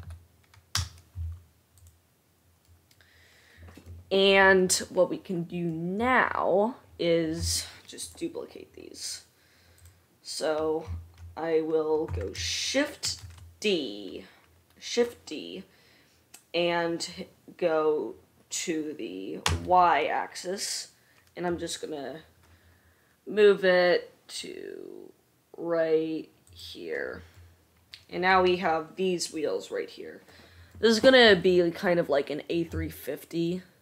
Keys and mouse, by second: 0.0 e, 1.9 click, 2.4-8.3 middle drag, 8.3 click, 8.6-10.0 middle drag, 10.0 drag, 10.1-33.8 middle drag, 13.3 shift+d.